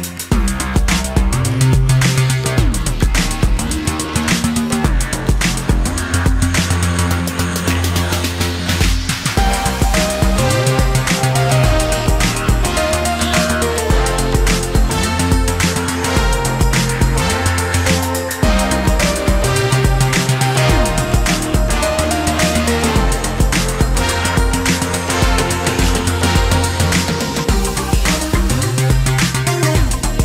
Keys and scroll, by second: 0.0 space, 0.1 Escape, 3.7 shift+s, 4.8 p, 6.5 space, 6.6 Escape, 7.9 m, 11.0 space.